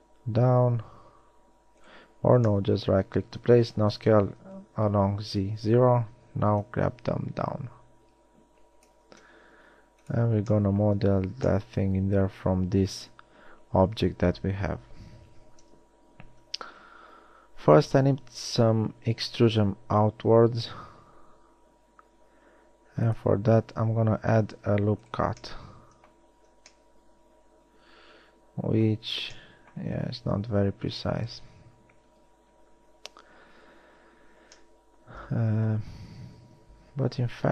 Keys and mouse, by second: 4.1 s, 9.4 ctrl+Tab, 15.5 KP_1, 16.5 z, 22.1 ctrl+r, 26.7 z, 30.6 KP_1.